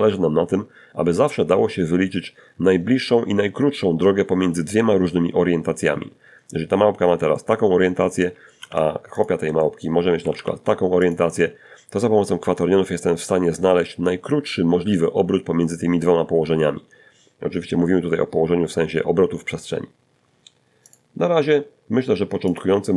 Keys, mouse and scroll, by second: 4.6 scroll down 2, 5.5-6.6 middle drag, 6.8 shift+d, 7.4 shift+click, 7.8 shift+middle click, 8.4 r, 8.6 r, 9.2 shift+click, 19.1 click, 20.7 click.